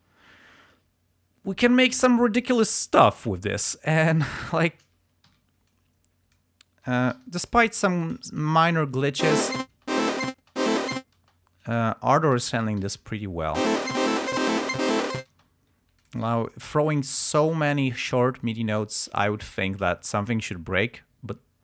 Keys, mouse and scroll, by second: 4.6 shift+right click, 5.4 t, 5.7 click, 7.2 g, 7.5 click, 7.8 s, 8.0 shift+click, 8.3 shift+right click, 9.3 space, 11.8 click, 12.4 alt+d, 13.7 space, 15.4 space, 16.1 click, 16.5-17.2 ctrl+scroll up 4, 17.6 ctrl+scroll down 2, 18.1-18.5 ctrl+scroll up 2, 18.7 ctrl+scroll down 2.